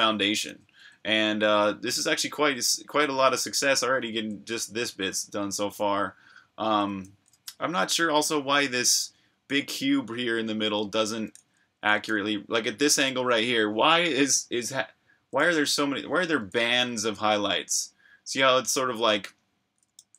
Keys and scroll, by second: 0.0-4.8 typing, 8.9-12.1 typing, 15.1-18.2 typing, 19.5-20.1 typing.